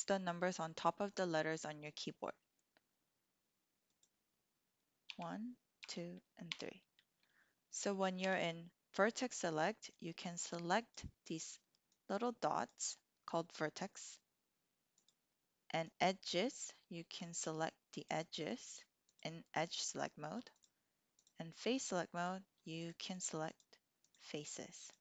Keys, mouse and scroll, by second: 3.9 click, 5.0 1, 5.7 2, 6.5 3, 8.2 1, 9.9 click, 10.8 click, 11.2 click, 11.9 click, 12.5 click, 13.4 click, 15.0 click, 15.9 click, 17.3 shift+click, 18.0 shift+click, 19.7 shift+click, 21.2-22.5 drag, 22.7 shift+click, 23.5 shift+click, 24.0 shift+click, 24.4-25.0 shift+drag.